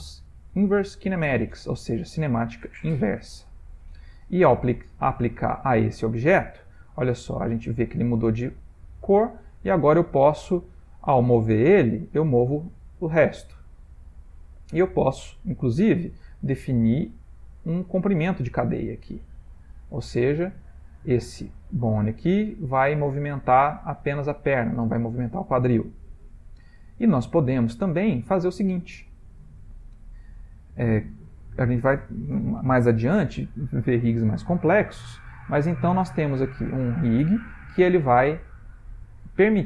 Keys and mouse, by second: 4.3-5.3 shift+middle click, 7.8 g, 17.3 click, 17.9 click, 18.3 click, 20.2 click, 21.7 g, 35.1 g.